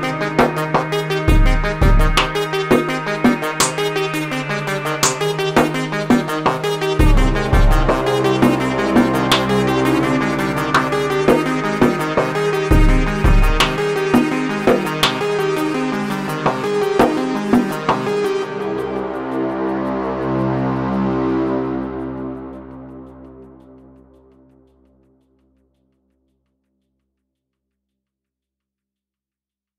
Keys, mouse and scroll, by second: 3.9-5.2 drag, 5.2 Tab, 6.9-11.1 drag, 11.1 space, 14.4 space, 15.2 Left, 17.7-19.0 shift+drag, 19.3-20.8 shift+drag, 20.8 space, 21.5-22.5 drag, 22.6-23.6 drag, 24.4-27.3 drag, 27.4-29.0 drag.